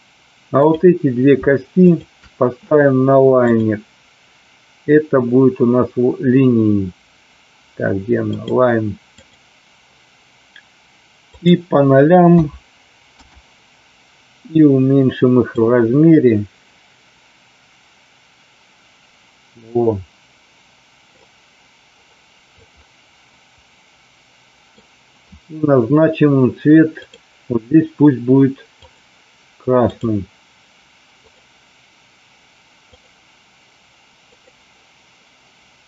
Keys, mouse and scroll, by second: 0.6 click, 1.8 shift+click, 3.5-8.5 drag, 11.1-13.5 drag, 15.6-21.2 drag, 22.5-24.8 middle drag, 27.0 click, 28.8 click, 29.8 click, 31.3-33.0 drag, 34.2 click.